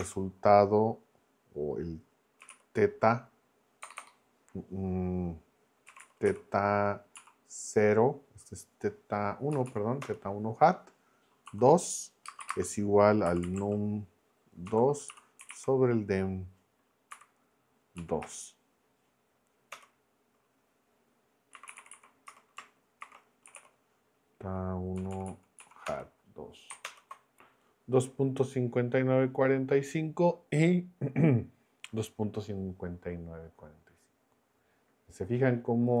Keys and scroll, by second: 0.0 Return, 2.2-3.8 typing, 5.6-6.7 typing, 7.1 Down, 9.5 Down, 10.0 Return, 11.4-16.0 typing, 17.1 n, 17.9 Down, 18.2 Return, 19.7 Return, 21.3-24.1 typing, 25.0 Down, 25.7 Down, 26.8 ctrl+Return.